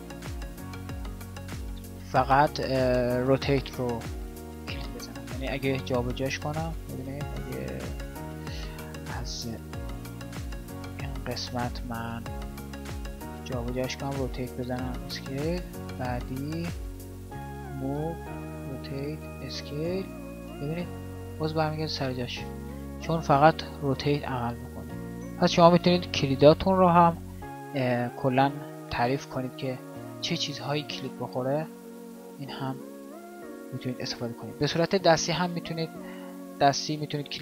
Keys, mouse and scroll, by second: 5.9 g, 9.8 g, 12.8 g, 13.8 r, 17.6 g.